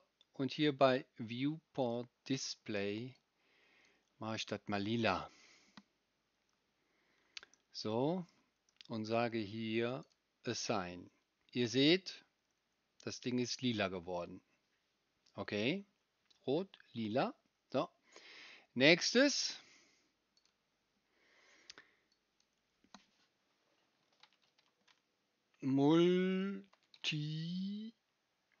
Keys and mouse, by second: 1.8 middle click, 1.9-10.1 right drag, 10.1-28.6 middle drag.